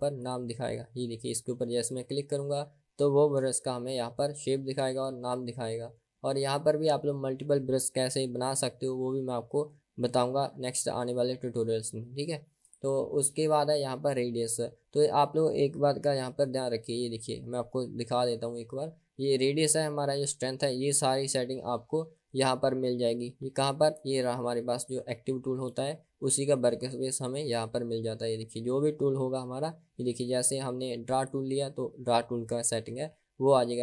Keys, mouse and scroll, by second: 0.3-1.5 drag, 2.0-3.7 drag, 5.1-12.9 drag, 27.6 click, 31.2 click.